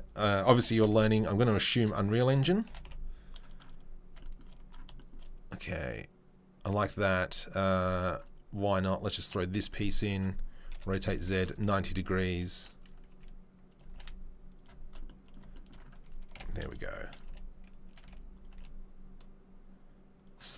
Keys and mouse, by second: 0.6 g, 9.4-20.5 middle drag, 10.7 r, 12.1 s, 13.1 s, 13.8 g, 16.3 KP_7, 17.2 g, 18.0 s, 18.5 g.